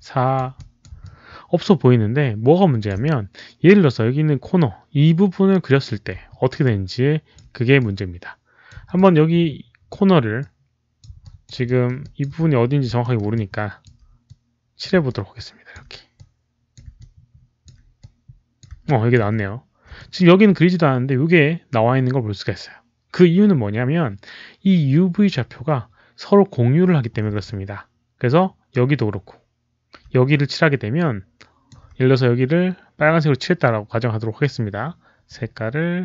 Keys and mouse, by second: 0.5 alt+click, 0.7 alt+middle click, 0.9-2.8 alt+drag, 3.1 alt+middle click, 6.5 alt+click, 7.7 alt+click, 8.9 alt+click, 10.3 alt+click, 11.2 alt+click, 11.6 alt+middle click, 11.9 alt+click, 13.2 alt+middle click, 13.2 alt+click, 13.7 alt+middle click, 14.2 alt+click, 14.7 alt+middle click, 15.0 alt+click, 15.6 alt+middle click, 16.0 click, 16.9 alt+click, 17.5 alt+middle click, 17.9 click, 18.8 alt+click, 19.9 alt+click, 24.0 alt+click, 25.8 alt+click, 27.4-28.6 alt+drag, 30.2-31.6 alt+drag, 35.1 alt+click.